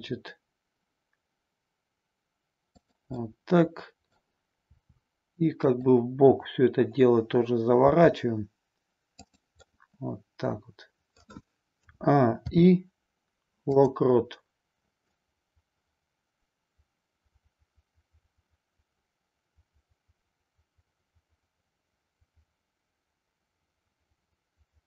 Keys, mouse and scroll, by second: 0.3 r, 2.8 click, 3.2 middle click, 4.8 r, 5.8 click, 7.8 r, 9.8-11.1 middle drag, 12.4 a, 12.4 i, 15.0-24.8 drag.